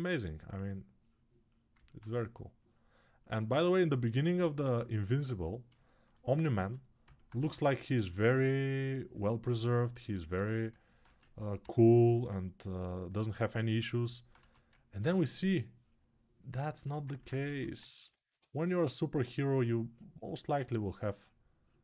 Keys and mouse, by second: 1.5-13.8 alt+drag, 6.4 2, 7.1 2, 11.4 [, 14.1 1, 17.2-21.8 drag, 17.2 2.